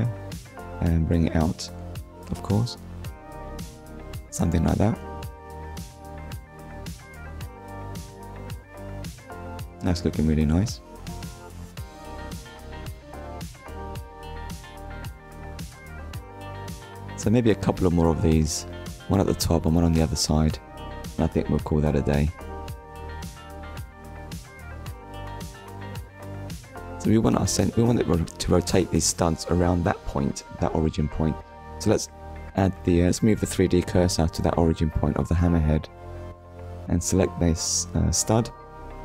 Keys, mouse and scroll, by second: 0.2 scroll up 1, 0.8 shift+middle click, 1.4 scroll up 1, 2.6 click, 3.2 ctrl+click, 7.0 click, 7.4 scroll down 1, 7.9 click, 8.3 middle click, 13.5 scroll up 1, 14.3 middle click, 14.9 scroll down 1, 15.7 shift+middle click, 16.2 middle click, 21.0 shift+middle click, 21.7 middle click, 23.4 click, 24.2 middle click, 25.5 click, 26.9 middle click, 29.7 shift+s, 31.1 click, 31.9 middle click, 35.0 click, 35.5 middle click, 37.6 right click.